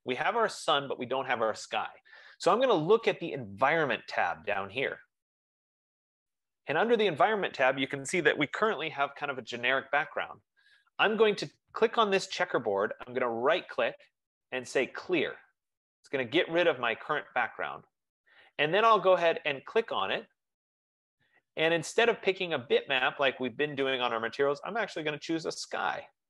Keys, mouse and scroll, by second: 4.8 click, 7.7 click, 13.7 right click, 15.8 click, 20.4 click.